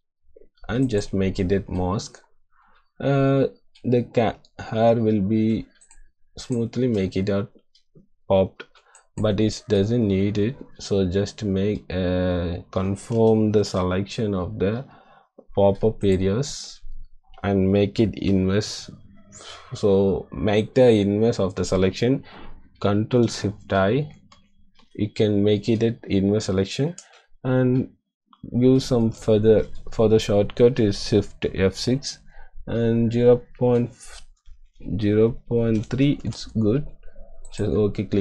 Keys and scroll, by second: 8.7 space, 13.8 ▬, 24.2 ctrl+shift+i, 28.9 shift+F6, 35.9-36.6 typing.